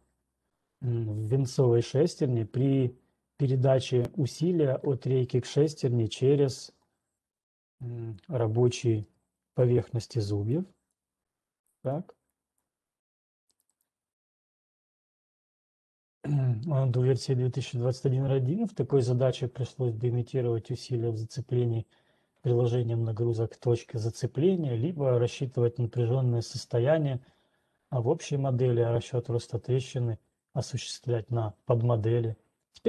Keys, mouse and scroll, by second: 9.0 ctrl+2, 9.0 scroll down 5, 10.0-11.0 scroll, 11.0 click, 11.5 click, 13.0 click, 13.5 click, 14.6 right click.